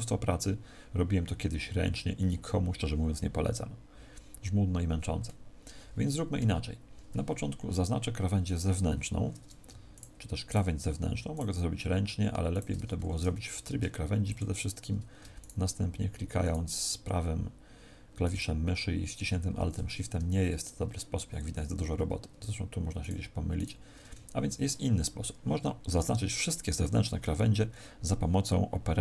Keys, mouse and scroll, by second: 9.8 alt+shift+right click, 12.9 a, 13.5 ctrl+Tab, 15.3 alt+shift+right click, 20.1 z, 22.9 alt+shift+right click, 24.1 a.